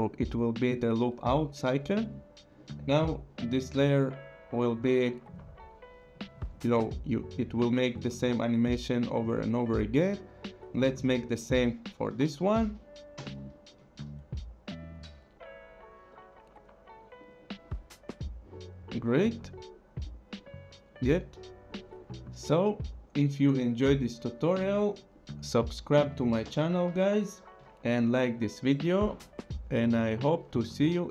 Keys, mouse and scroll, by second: 1.6 click, 3.0 click, 4.7 click, 11.3 click, 12.1 u, 13.4 alt+click, 14.8 click, 17.2 click, 21.7 click, 22.8 click, 24.0 click, 26.9 click, 28.6 click.